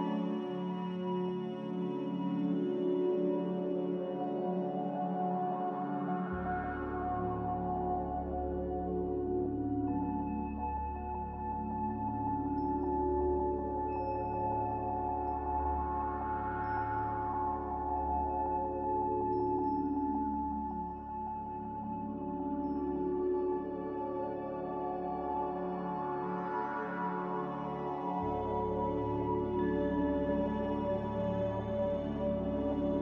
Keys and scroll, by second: 1.5 Escape, 4.5 a, 15.0 z, 20.0 2, 23.6 g, 29.3 z, 31.9 a.